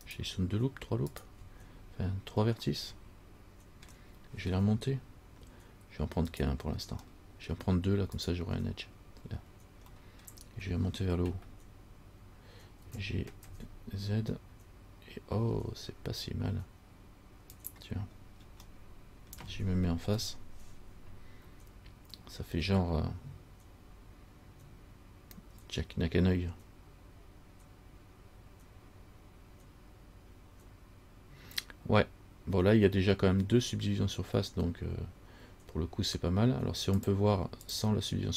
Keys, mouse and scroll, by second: 0.3 shift+right click, 1.3 shift+right click, 3.0 middle click, 6.6 right click, 7.3 middle click, 8.4 shift+right click, 10.2 middle click, 10.2 scroll up 1, 10.4 scroll down 1, 13.0 g, 18.4-18.8 scroll down 2, 19.0 middle click, 20.2 KP_1, 37.2 click, 37.8 click.